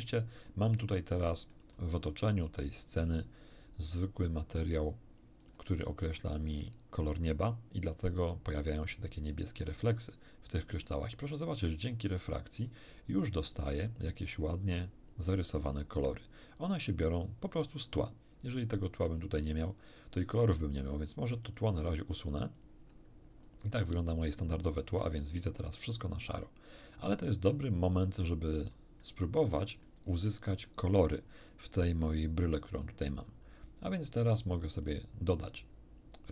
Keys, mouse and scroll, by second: 0.2 middle click, 0.8 middle click, 1.8 middle click, 5.4 click, 6.1-6.6 scroll up 1, 8.0-9.9 middle drag, 10.1 middle click, 12.3 scroll up 1, 19.0-19.3 scroll down 2, 21.4 click, 22.6 click, 23.4 scroll down 2, 24.8 scroll down 2, 25.2-28.2 shift+drag, 28.5 click, 29.5 click, 29.8-30.5 drag, 30.6 middle click, 32.7-35.0 drag, 35.4-36.3 middle drag.